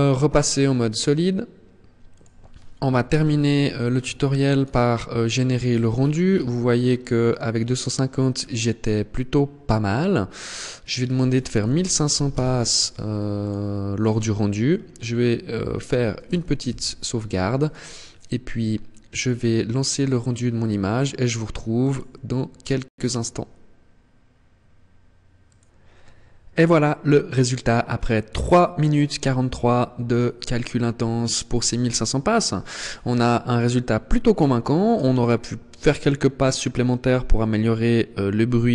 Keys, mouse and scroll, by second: 2.2 ctrl+s, 3.6 click, 4.7-7.4 scroll down 11, 7.4-9.0 scroll down 1, 9.0 scroll down 1, 9.4 click, 13.1-15.7 scroll up 12, 15.7 ctrl+s, 15.7-16.8 scroll up 1, 20.8 click.